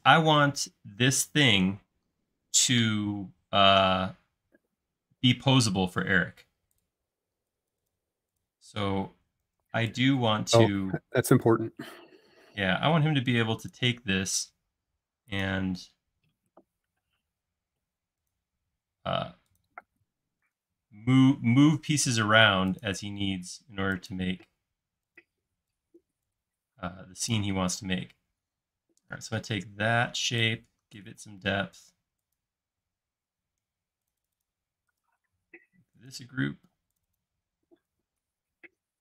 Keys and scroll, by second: 0.1 space, 4.0 l, 6.4 space, 9.4 super+c, 10.4 super+v, 14.2 l, 23.1 l, 25.4 e, 27.8 space, 30.0 p, 31.2 space, 37.6 e, 38.7 space.